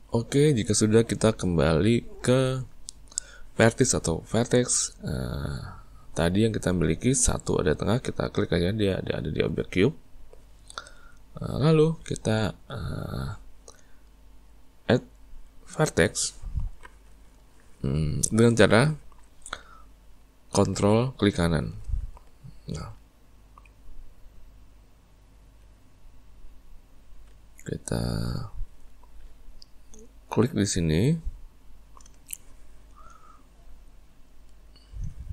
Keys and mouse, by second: 1.5-5.2 middle drag, 9.8 click, 11.3-15.3 shift+middle drag, 31.0 right click, 34.5 right click.